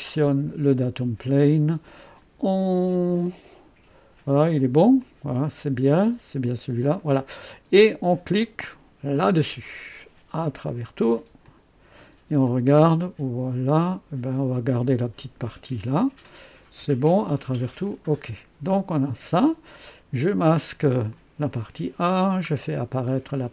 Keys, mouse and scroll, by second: 0.1 click, 1.3 click, 4.9 click, 6.4 click, 9.1 click, 10.6 click, 11.4 click, 12.4-14.2 drag, 17.8 click, 21.0 click, 21.6 space, 21.6 space, 22.4-22.8 scroll down 1.